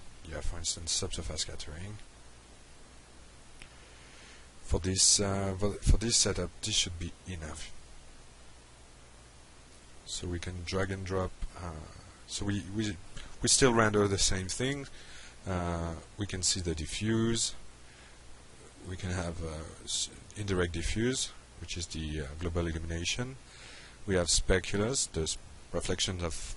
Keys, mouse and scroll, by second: 0.5 click, 4.4 click, 5.8 click, 7.3 click, 17.0-17.4 drag, 18.8 drag, 23.1-23.8 drag.